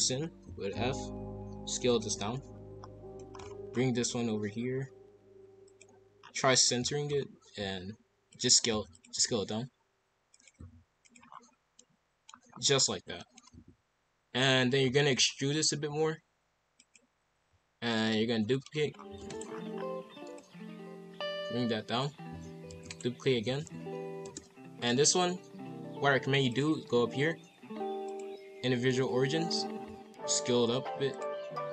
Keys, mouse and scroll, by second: 0.2 scroll up 1, 0.4 s, 2.1 KP_5, 2.3 KP_1, 2.7-3.2 scroll down 2, 3.2 shift+middle click, 3.4-3.8 scroll up 4, 3.9 g, 6.2-7.2 scroll up 10, 6.8 shift+middle click, 7.6 s, 8.7 s, 9.1 g, 10.5 s, 11.3-11.8 scroll down 5, 11.8 middle click, 12.3-12.9 scroll down 3, 13.2 middle click, 13.5 KP_5, 14.1 KP_1, 14.1-15.7 scroll up 7, 14.9 shift+middle click, 15.7 e, 18.0 ctrl+l, 18.9 scroll down 4, 19.2 shift+d, 19.5-19.9 scroll down 4, 20.3 click, 22.3 a, 22.7 shift+d, 23.3 r, 26.4-29.5 drag, 29.8 s.